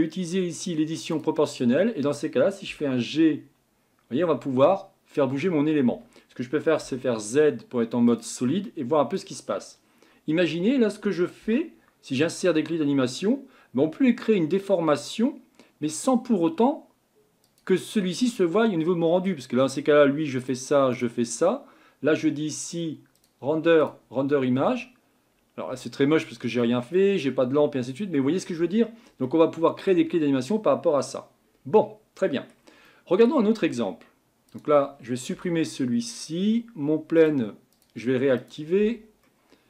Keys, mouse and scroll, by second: 1.1 click, 2.7 g, 6.8 z, 8.6-11.4 middle drag, 11.4 g, 20.4 click, 20.9 click, 23.1-24.4 drag, 25.7 click, 26.6-31.0 middle drag, 31.0-31.6 scroll down 2, 31.6-32.2 scroll up 2, 32.2-33.5 middle drag, 33.5 Tab, 34.5 click, 35.3 Delete, 35.7-37.2 scroll down 5, 37.2 click, 37.7 click, 38.4 click, 38.8 Delete, 39.2-39.6 middle drag.